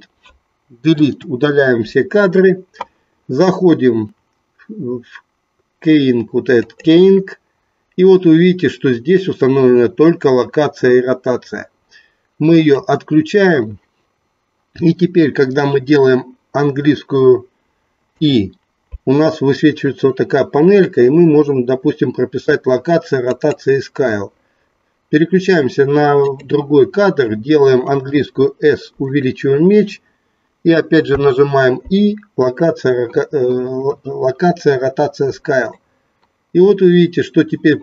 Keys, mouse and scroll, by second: 0.9 Delete, 6.7-9.3 drag, 13.5 click, 18.0 i, 26.4 click, 27.9 s, 29.2 click, 31.0 i, 35.8-37.8 drag.